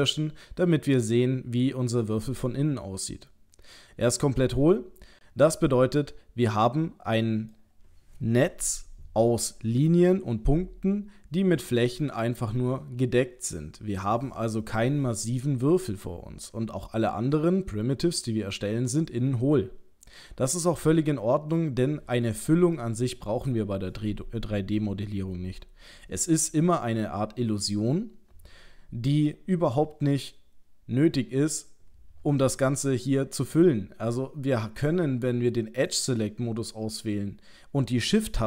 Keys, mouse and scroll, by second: 0.5 middle click, 15.2 middle click, 32.6 middle click, 34.8 click, 35.9 click.